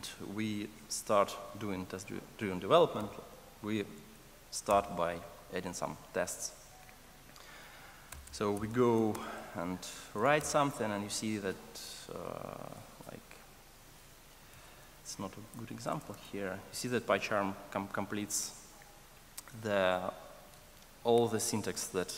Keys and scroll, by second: 14.8 Escape.